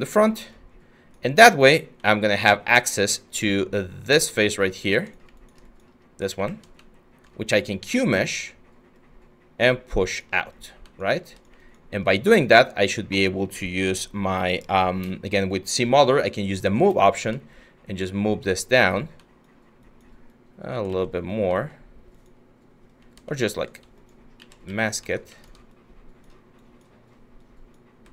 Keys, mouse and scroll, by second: 6.0 q, 15.2-16.4 scroll, 16.4 middle click, 16.4 middle click, 16.4 middle click, 20.5 ctrl+z, 24.0 ctrl+z, 27.8 ctrl+z.